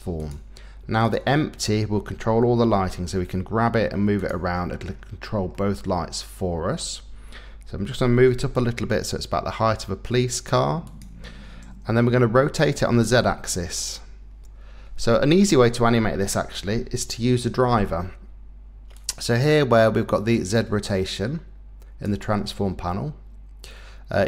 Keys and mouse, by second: 0.2 click, 1.0 click, 2.7 g, 4.2 click, 5.5-6.8 drag, 7.9 g, 8.3 z, 10.9 click, 12.6 r, 13.0 z, 15.3 Escape, 16.7 n, 18.9-20.6 drag.